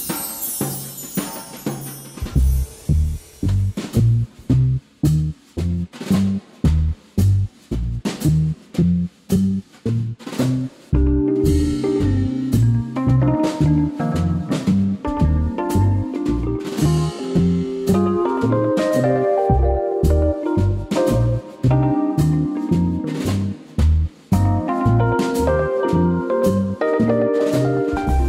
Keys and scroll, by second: 0.8 super+z, 3.2 super+z, 3.6 super+e, 5.2 super+z, 8.7 super+z, 12.9 super+z, 18.0 super+x, 20.5 super+z, 21.6 super+z, 22.5 super+x, 23.9 super+x, 25.3 super+x, 25.4 super+z, 26.7 alt+shift+super+n, 27.2 alt+BackSpace.